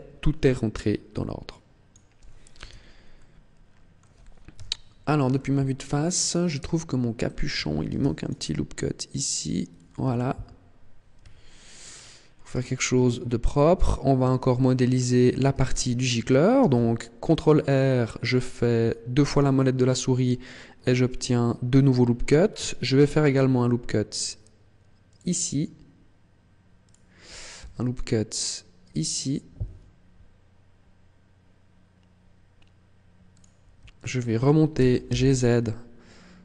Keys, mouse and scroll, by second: 1.4 click, 2.5 Tab, 3.2 middle click, 4.4 KP_1, 5.2 shift+middle click, 5.9-6.3 scroll up 4, 6.5 Tab, 7.8 ctrl+r, 9.6 click, 10.0 ctrl+r, 11.6-12.0 scroll down 8, 12.4 Tab, 12.8 scroll down 1, 13.4-14.0 scroll up 8, 14.2 shift+middle click, 14.8-15.3 scroll up 2, 15.3 Tab, 16.5 ctrl+r, 19.4 click, 22.8 ctrl+r, 26.8 click, 27.4 ctrl+r, 33.3 click, 33.8 alt+right click, 34.6 g.